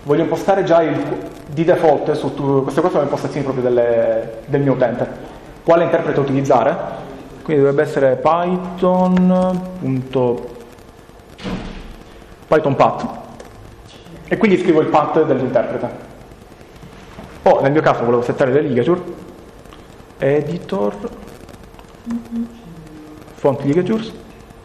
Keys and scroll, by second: 7.1-9.5 typing, 10.6 typing, 12.0 Down, 12.6 Down, 17.3 Right, 17.5 Right, 19.8 typing, 22.1 typing.